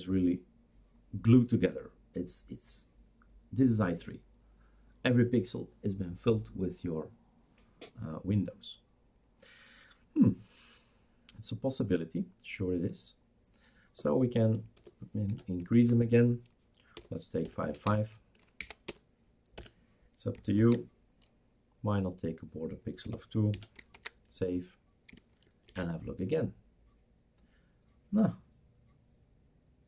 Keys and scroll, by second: 14.8 BackSpace, 15.3 2, 15.8 Up, 17.0 BackSpace, 17.4 5, 18.6 Down, 18.9-19.6 BackSpace, 20.6 ctrl+s, 23.0 BackSpace, 23.5 BackSpace, 23.9 ctrl+s, 25.8 shift+super+r.